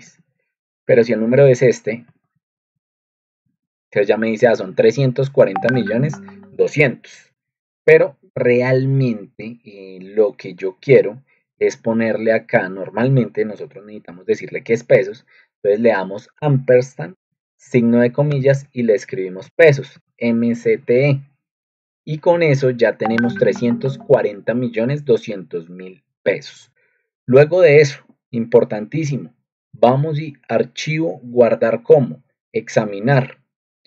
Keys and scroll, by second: 0.8-3.3 typing, 12.9-14.5 typing, 18.0-22.4 typing.